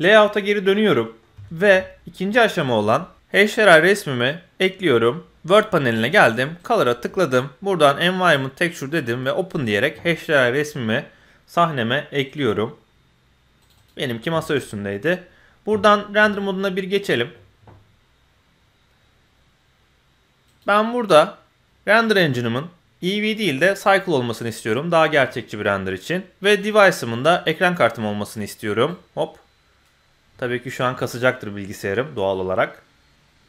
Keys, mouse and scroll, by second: 0.4 middle click, 1.4 shift+middle click, 1.8-2.3 middle drag, 2.3 scroll down 1, 2.5 middle click, 3.3 click, 6.6-8.3 drag, 9.5 click, 15.7 z, 17.9 scroll up 1, 18.5 scroll down 1, 20.4 click, 23.2-24.6 drag, 27.3-27.8 drag, 28.7 click, 29.8-32.1 drag, 32.1 z, 33.0 middle click.